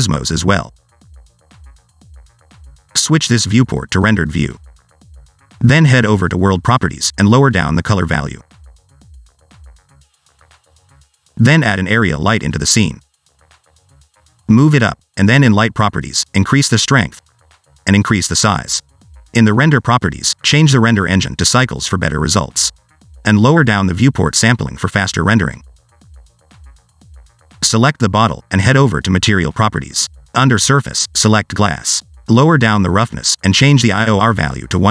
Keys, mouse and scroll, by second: 0.3 click, 1.0-1.3 scroll up 2, 1.3-2.9 scroll down 1, 3.7-5.1 scroll down 1, 5.1 click, 7.2 click, 8.1 click, 11.8 scroll up 1, 12.0 shift+a, 14.4 click, 16.8 click, 17.3 click, 17.9 0, 19.2 click, 20.1 click, 20.4 click, 23.1 click, 28.2 click, 29.3 click, 30.0 click, 30.9 click, 31.0 click, 33.8 click.